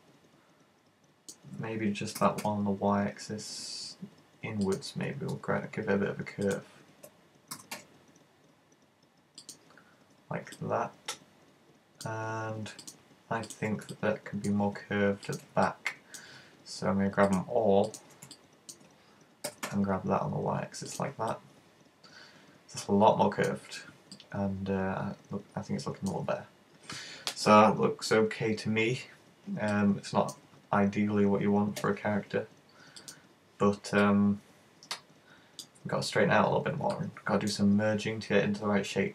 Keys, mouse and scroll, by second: 2.3 g, 4.8 click, 5.1 space, 6.6 right click, 7.5 super+g, 9.6 click, 10.6 middle click, 12.9 right click, 13.5 shift+right click, 14.0 middle click, 15.3 shift+right click, 15.8 middle click, 17.3 shift+right click, 17.9 shift+right click, 18.4 middle click, 19.5 g, 21.0 click, 21.3 middle click, 24.2 middle click, 26.5-27.3 scroll down 2, 27.3-27.9 scroll down 17, 27.9-28.8 scroll up 2, 28.8-29.4 scroll up 15, 29.8 middle click, 30.7-31.3 scroll down 6, 31.9 KP_1, 33.1 click, 34.0 middle click, 35.8-36.5 scroll up 10, 36.5-37.0 scroll down 2, 37.0 middle click.